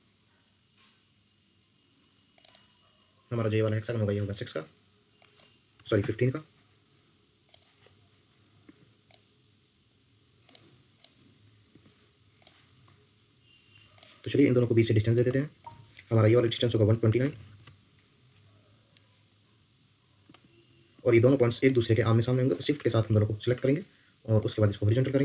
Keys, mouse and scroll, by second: 0.0 Escape, 2.4 double click, 5.8 typing, 6.0 Return, 8.6 Escape, 11.7 Escape, 16.1-17.7 typing, 20.3 Escape, 20.9 Escape, 22.5 shift+click.